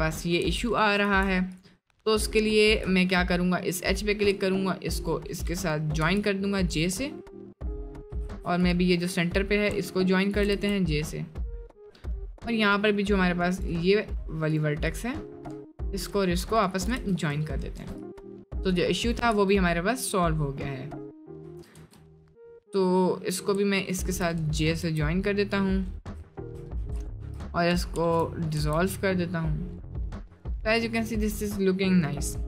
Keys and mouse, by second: 1.1 1, 6.0 j, 7.1 middle click, 8.3 ctrl+z, 8.6-9.7 drag, 10.2 shift+click, 10.6 j, 10.9 middle click, 12.0 middle click, 12.5 middle click, 15.0 click, 15.8 shift+click, 16.5 shift+click, 17.0 j, 17.5 middle click, 17.9 Tab, 18.1 click, 18.3-19.1 middle drag, 19.6 middle click, 21.0 middle click, 23.8 shift+click, 24.8 j, 26.8 2, 28.0 ctrl+x, 28.6 Tab, 29.4 middle drag, 29.9 middle drag, 30.4 click, 30.6-31.7 middle drag.